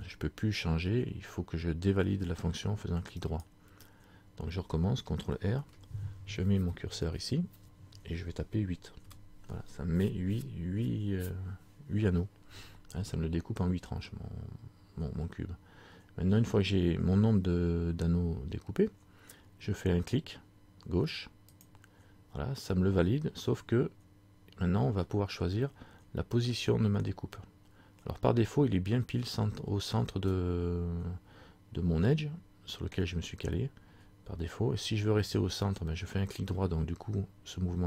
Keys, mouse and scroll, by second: 5.6 ctrl+r.